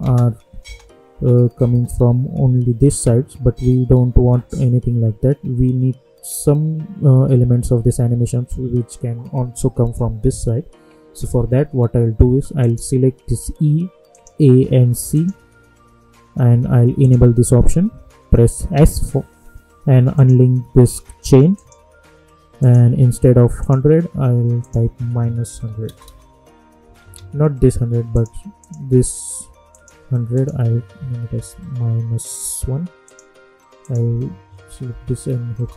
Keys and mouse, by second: 0.0 space, 12.6 click, 14.1 ctrl+click, 18.7 s, 20.1 click, 25.8 Return, 27.1 ctrl+z, 28.1 click, 33.0 click, 35.6 Return.